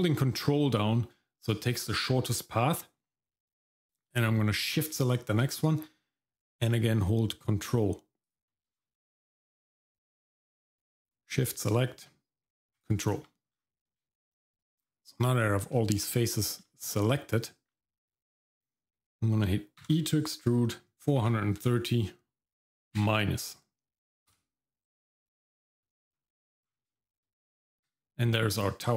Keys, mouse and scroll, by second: 3.4 middle click, 4.7 shift+click, 8.2 ctrl+click, 8.8 shift+middle click, 9.7 middle click, 11.0 shift+click, 12.7 ctrl+click, 13.5-13.9 scroll down 2, 13.9 shift+middle click, 14.8-15.4 scroll up 2, 15.4-15.7 scroll down 1, 15.8 shift+middle click, 16.1-16.6 scroll down 1, 16.7 shift+middle click, 17.1-17.7 scroll up 1, 17.7 middle click, 18.1-19.2 scroll down 1, 19.8 e, 25.3 shift+middle click, 26.1-26.6 scroll up 2, 26.6 scroll down 2, 27.0 shift+middle click, 27.7 Tab, 28.7 shift+middle click.